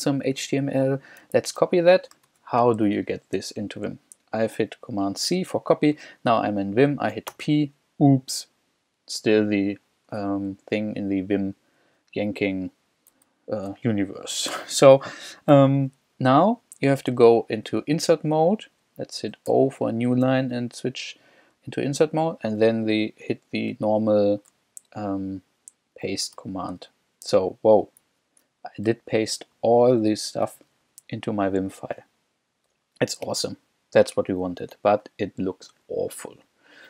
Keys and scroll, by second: 1.6 super+c, 2.3 super+Tab, 3.4 super+k, 5.6 j, 6.0 k, 7.3 shift+p, 14.6 u, 15.6 j, 16.2 k, 19.5 o, 26.4 super+v, 28.0 Escape, 28.9 k, 31.4 k, 31.9 k, 32.8 j, 33.8 j.